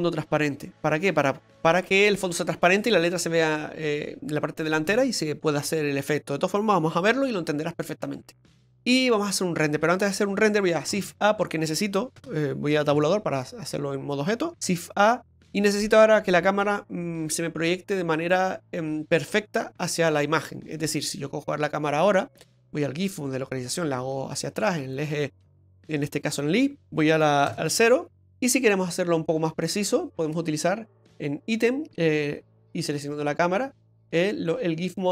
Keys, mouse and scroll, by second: 11.0 shift+a, 12.2 BackSpace, 12.9 Tab, 14.7 shift+a, 20.7-21.0 scroll down 2, 21.0 middle click, 22.5 click, 23.7 click, 25.3 scroll down 2, 26.1-26.5 scroll down 2, 26.8 middle click, 27.5 KP_0, 28.2-29.2 scroll up 5, 29.2 scroll up 1, 29.2 click, 34.5 click.